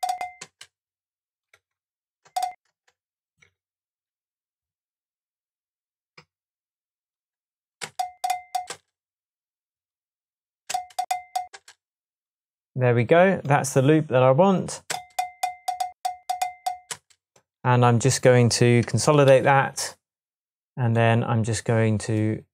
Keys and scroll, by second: 0.4 space, 1.6 BackSpace, 2.3 space, 3.5 BackSpace, 7.8 space, 8.4 space, 10.7-11.6 space, 14.9 space, 16.9 space, 19.3 super+j.